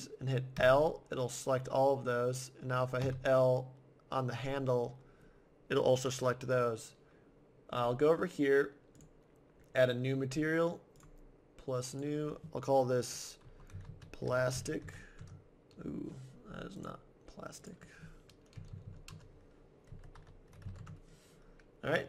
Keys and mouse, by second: 0.6 l, 3.0 l, 9.0-10.8 drag, 10.9-13.6 drag, 16.8-18.5 drag.